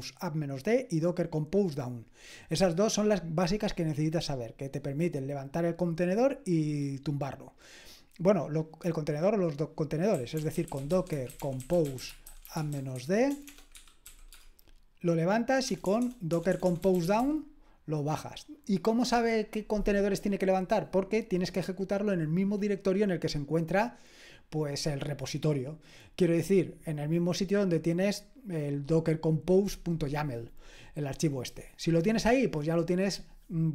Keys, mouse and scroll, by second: 9.9-14.3 typing, 15.6-17.6 typing.